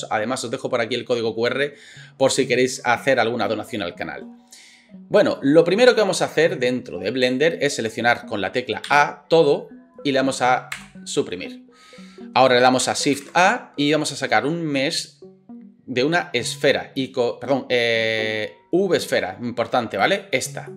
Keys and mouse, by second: 8.9 a, 10.7 Delete, 12.8 click, 15.8 click.